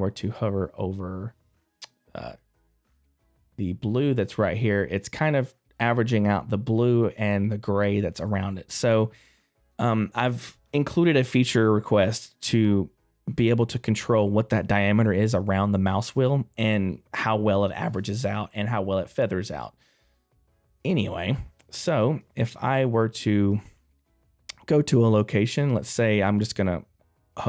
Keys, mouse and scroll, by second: 20.6 middle click, 20.6 click, 22.5 right click, 23.9 middle click.